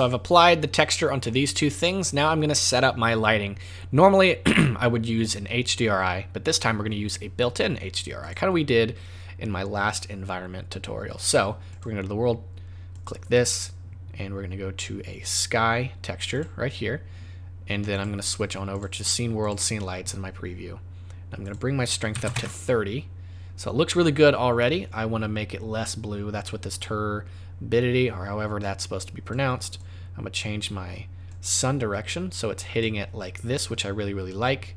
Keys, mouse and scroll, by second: 8.2 click, 11.7 click, 12.9 click, 17.9 click, 21.4 click, 26.8 click, 31.3 click.